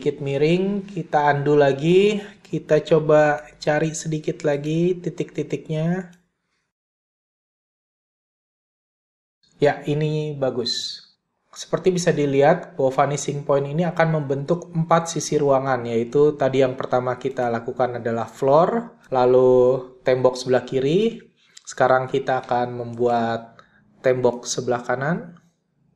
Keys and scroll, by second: 0.0 super+z.